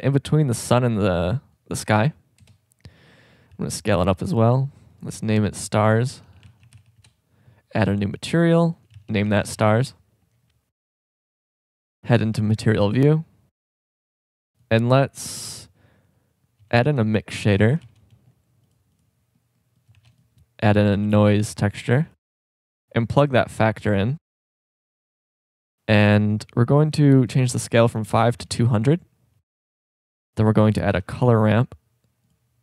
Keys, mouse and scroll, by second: 2.6 KP_0, 3.5 s, 14.8-16.4 drag, 16.9 shift+a, 19.9 shift+a, 23.7-24.5 drag, 28.3 KP_0, 29.6 shift+a.